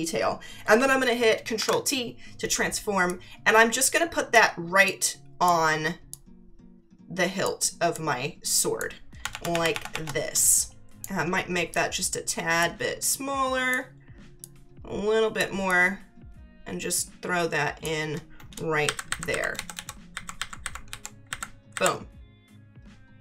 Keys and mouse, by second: 3.1 click, 4.8 click, 6.1 click, 7.9 click, 9.3 ctrl+=, 10.3 space, 10.5 click, 11.7 click, 13.0 click, 14.4 click, 15.7 click, 18.8 Up, 19.5 Left, 20.1 Up, 20.9 Left, 21.2 Up.